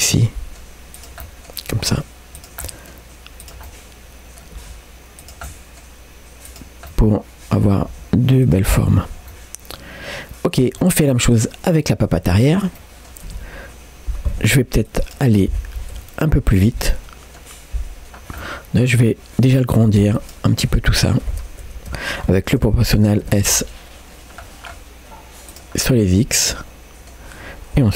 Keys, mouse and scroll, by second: 0.0 middle click, 1.0 click, 1.2 middle click, 1.8 g, 2.6 middle click, 3.4 click, 3.7 middle click, 4.6 g, 5.5 middle click, 6.5 click, 6.9 middle click, 7.9 g, 8.8 Tab, 9.1 scroll down 2, 9.3-10.6 middle drag, 10.8 shift+middle click, 11.1-11.5 shift+scroll up 1, 12.1 click, 12.8 middle click, 13.3 Tab, 14.3 3, 14.9 click, 15.9 KP_Decimal, 16.6 scroll down 1, 16.9 middle click, 18.2 scroll down 1, 18.4 middle click, 20.2 alt+click, 22.6 o, 25.8 scroll down 2, 26.0-27.2 middle drag.